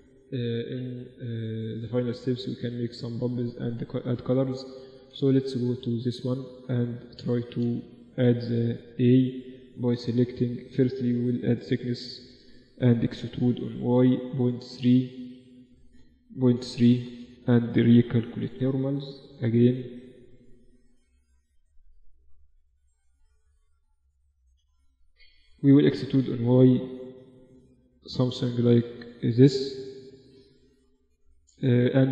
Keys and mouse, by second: 3.9 z, 4.5 Tab, 5.0-6.4 middle drag, 5.6 z, 6.3 Tab, 8.7 z, 9.5-11.2 middle drag, 10.0 Tab, 10.8 KP_7, 11.6 Tab, 11.8 a, 12.0 a, 13.0 e, 16.9 a, 17.1 a, 17.6 ctrl+n, 17.9 Tab, 18.6 KP_1, 18.9 Tab, 19.4 z, 20.5 z, 20.9 click, 21.6 z, 22.2 z, 23.4 KP_7, 24.4 z, 25.5 e, 29.0 Tab, 29.3-31.9 middle drag, 29.8 KP_1.